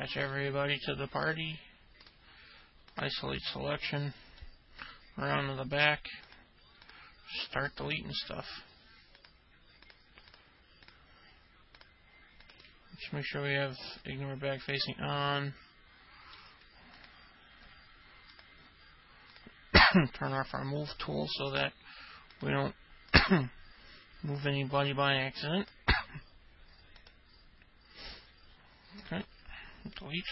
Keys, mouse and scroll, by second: 0.0 alt+middle click, 1.3 click, 4.5-5.7 alt+middle drag, 6.4 click, 7.6 ctrl+click, 8.3 ctrl+click, 9.3 ctrl+click, 10.0 ctrl+click, 10.4 ctrl+click, 11.9 ctrl+click, 12.6 ctrl+click, 14.7-16.5 alt+middle drag, 17.1 ctrl+click, 20.8 ctrl+click, 21.5 ctrl+click, 22.5 ctrl+click, 23.2 ctrl+click, 24.5 ctrl+click, 25.7 ctrl+click, 27.1 ctrl+click, 29.2 ctrl+click.